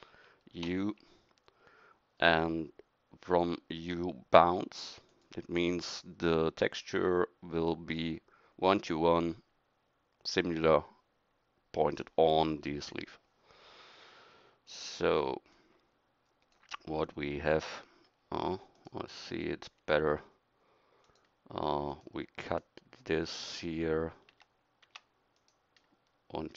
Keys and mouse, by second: 0.6 u.